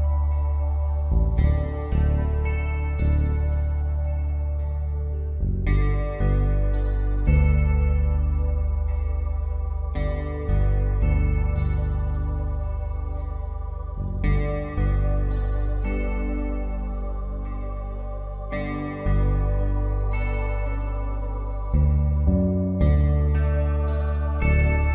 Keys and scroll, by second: 1.9 space, 13.7 Return, 16.8 ctrl+t, 24.7 Return.